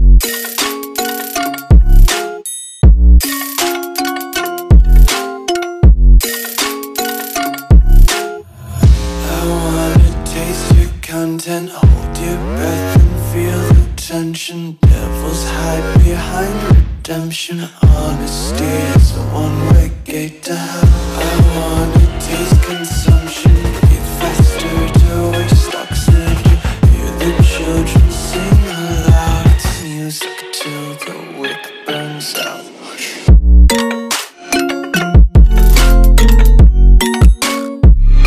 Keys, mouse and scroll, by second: 0.1 click, 3.0 Return, 4.3 a, 5.6 click, 7.4 d, 8.4 d, 9.6 s, 10.7 click, 14.8 ctrl+Num_Lock, 15.2 ctrl+s, 18.3 click.